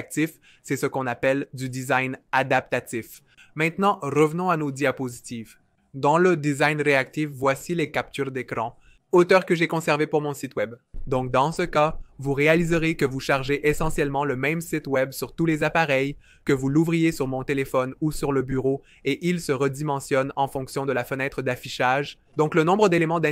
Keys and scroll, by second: 2.3 typing.